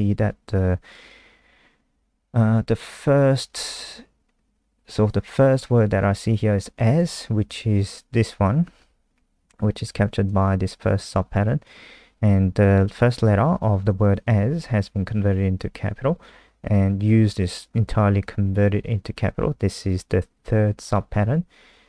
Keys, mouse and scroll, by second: 6.7 click.